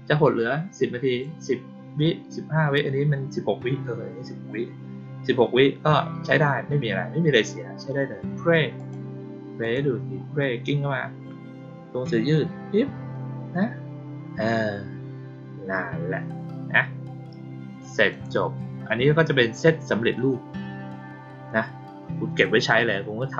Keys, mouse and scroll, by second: 8.7 click, 9.5 click, 18.0 click.